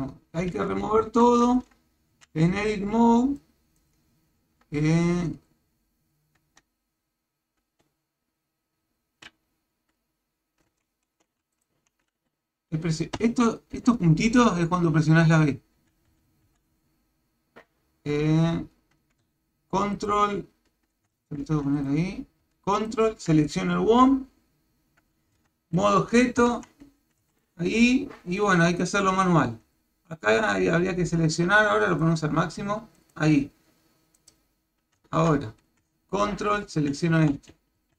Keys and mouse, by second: 1.1 Tab, 2.1 a, 2.9 b, 4.5 Tab, 6.4 Tab, 11.2 shift+z, 11.5 shift+click, 13.2 v, 13.8 v, 16.5 v, 20.0 ctrl+click, 21.1 ctrl+Tab, 22.8 ctrl+click, 25.4 Tab, 26.5 shift+z, 27.0 a, 27.2 b, 30.3-32.0 drag, 33.1 click, 34.2 click, 35.1 Tab, 36.5 ctrl+click, 37.1 Tab, 37.8 a.